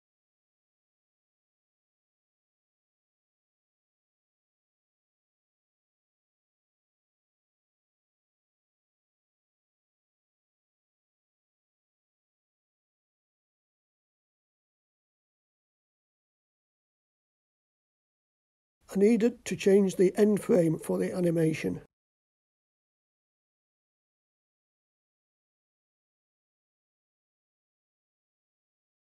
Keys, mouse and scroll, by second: 5.2-7.6 drag, 10.1-12.1 drag, 16.3 i, 18.7 click, 21.1-22.6 drag, 23.6-24.7 ctrl+middle drag, 27.0 click, 28.7-29.1 middle drag.